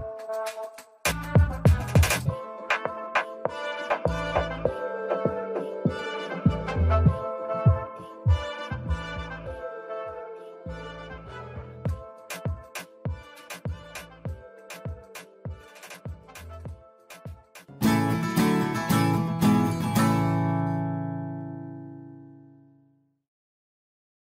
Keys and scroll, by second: 7.2 ctrl+space.